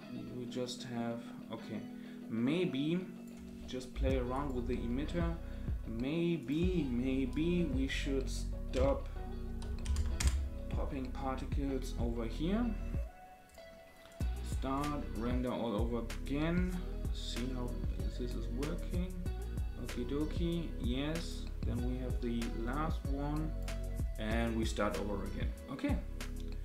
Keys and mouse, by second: 4.3 click, 6.4-10.8 drag, 13.4 click, 14.1 click, 14.7-23.6 drag.